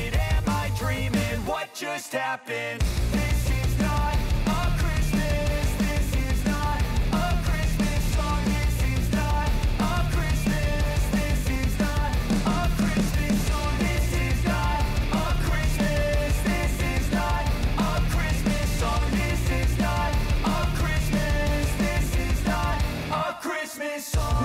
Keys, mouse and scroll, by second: 0.2 Return, 0.7-3.5 drag, 3.5 F9, 4.6-8.2 drag, 8.2-11.1 drag, 11.1 space, 12.4 [, 12.9 space, 14.2 click, 14.7 ctrl+d, 15.3 [, 16.4-19.6 drag, 20.2 space, 23.0-24.4 drag.